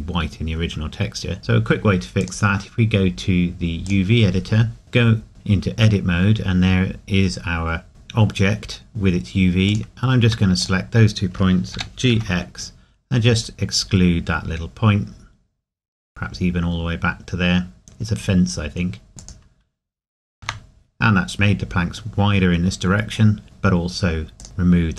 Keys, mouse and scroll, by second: 0.0 scroll down 1, 2.2 click, 4.8 scroll down 1, 7.6 scroll up 1, 7.9-8.5 scroll down 1, 9.7 click, 11.8 g, 19.2 click, 24.4 click.